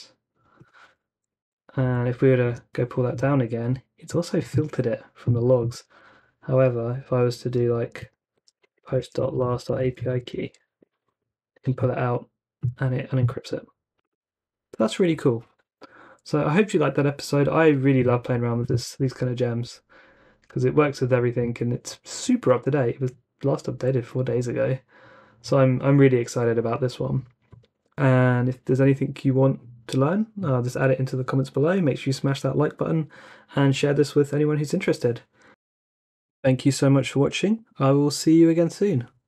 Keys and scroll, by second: 1.4 Up, 2.4 Return, 8.1-11.1 typing, 10.8 Return.